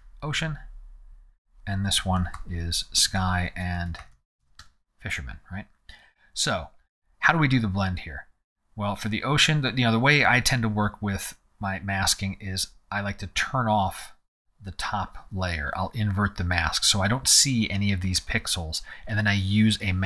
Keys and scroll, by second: 0.0-0.2 typing, 1.7-4.9 typing.